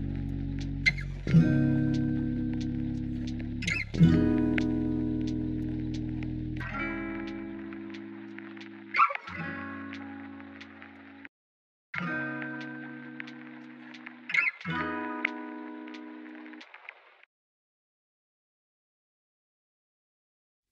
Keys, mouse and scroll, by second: 3.1 shift+v, 13.0 shift+v, 20.6 shift+middle click.